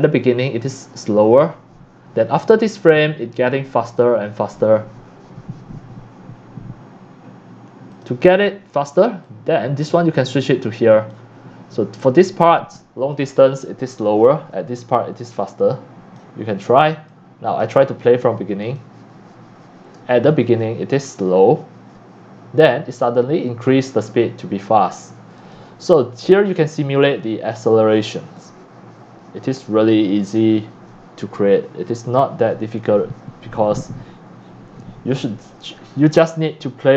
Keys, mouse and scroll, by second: 2.9-3.7 drag, 7.9 click, 8.1 click, 9.3-9.8 drag, 10.4 click, 15.6-16.1 drag, 17.1 click, 18.6 click, 21.5-24.0 drag, 25.4 click, 25.6-30.7 drag, 32.3-32.7 scroll up 3, 34.4 click, 35.7 scroll down 3.